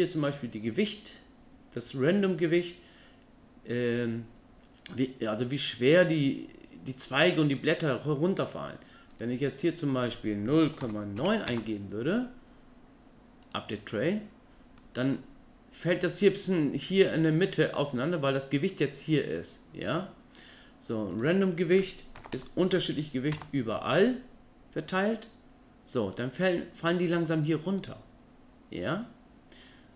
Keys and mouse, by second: 9.2 click, 9.6-11.5 drag, 14.8-15.1 middle drag, 21.1-23.3 drag, 26.1-26.4 middle drag, 27.8-29.9 middle drag.